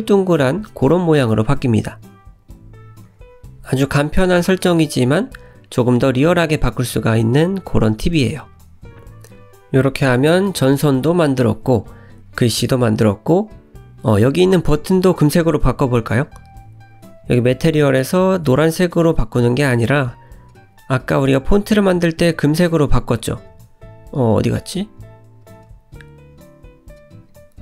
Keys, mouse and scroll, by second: 2.9 scroll down 2, 3.1 middle click, 3.6 scroll down 2, 3.9 click, 4.4 middle click, 6.0-6.5 scroll down 4, 6.5 middle click, 8.4-9.5 scroll down 8, 10.8-11.3 scroll up 2, 11.4 shift+middle click, 11.9-12.4 scroll up 3, 14.0 click, 16.0 click, 19.4 click, 27.0 click.